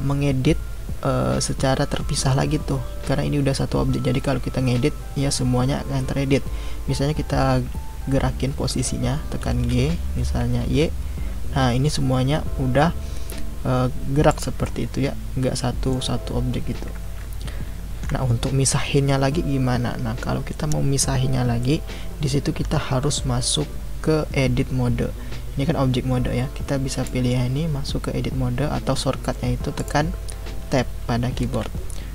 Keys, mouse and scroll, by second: 9.5 g, 14.6-17.8 middle drag, 17.8 ctrl+z, 21.6-24.6 middle drag, 26.9-29.8 drag, 31.3 Tab.